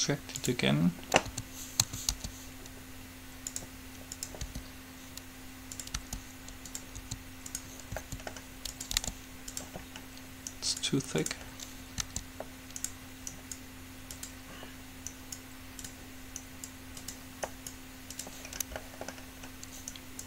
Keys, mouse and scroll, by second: 1.6 a, 2.1 a, 2.3 g, 4.3-6.1 drag, 4.6 r, 6.1 g, 7.1 s, 8.1 s, 9.1 g, 10.1 middle click, 10.6-11.6 drag, 10.8 right click, 12.1 g, 15.1 click, 15.7 click.